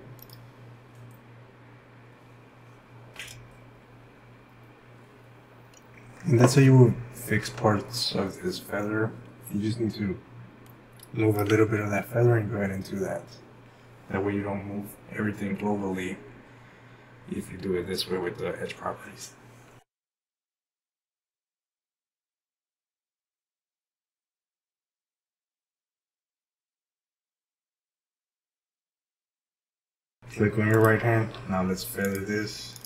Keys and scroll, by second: 10.2-11.4 typing, 20.3-20.7 typing.